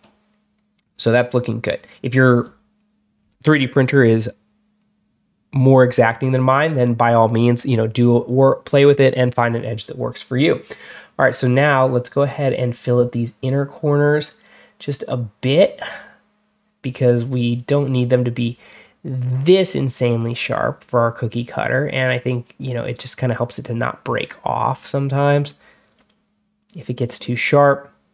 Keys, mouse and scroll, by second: 14.1 click, 15.6 click, 17.4 click, 21.9 click, 24.5 click, 25.8 click.